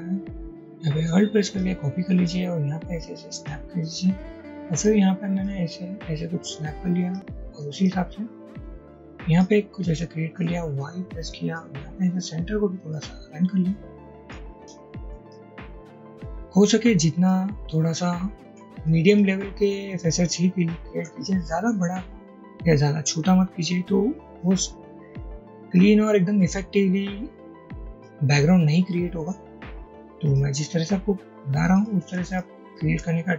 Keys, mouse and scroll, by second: 0.5 ctrl+z, 1.3 click, 2.5-3.5 alt+drag, 8.7-9.5 alt+drag, 10.7 ctrl+y, 12.3-13.4 drag, 13.9 ctrl+y, 16.3-17.4 drag, 18.5 ctrl+y, 19.7 click, 21.1 ctrl+y, 32.4 shift+click.